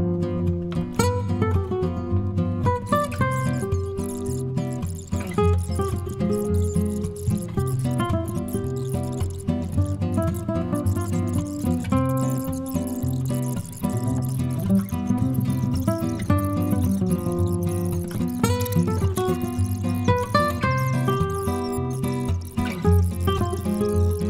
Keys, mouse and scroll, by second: 16.0 click, 16.3 click, 16.7 click, 18.3 click.